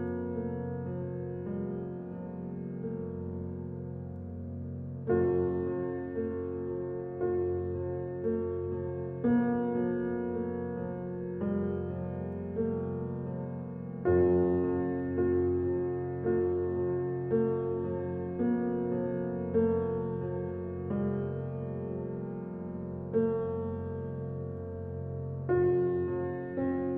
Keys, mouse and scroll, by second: 1.5 g, 3.0-3.7 middle drag, 3.7-4.2 scroll up 1, 4.2 d, 4.6 s, 6.8 alt+middle click, 7.0 alt+middle click, 7.7 scroll up 5, 7.9 shift+middle click, 8.4 g, 9.2 middle click, 9.7 click, 9.9-10.2 scroll down 5, 10.2-11.1 middle drag, 11.1 click, 11.5 s, 14.3-15.4 middle drag, 15.4-15.7 scroll up 2, 15.7-17.6 shift+middle drag, 18.2 shift+d, 20.0 ctrl+z, 20.7 r, 22.7 s, 24.0 g, 25.5 g.